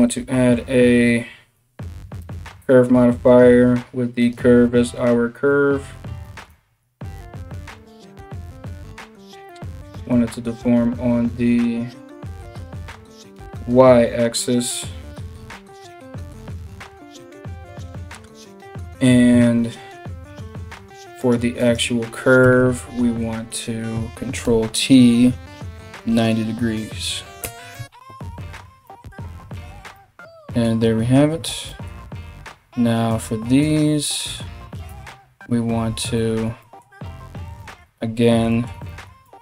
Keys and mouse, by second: 20.8 middle click, 20.8 right click, 21.2 middle click, 21.2 right click, 22.0 Tab, 22.5 a, 24.1 ctrl+t, 27.3 Tab, 32.7 middle click, 32.7 right click, 33.2 middle click, 33.2 right click, 33.7 middle click, 33.7 right click, 34.5 Tab, 38.9 s.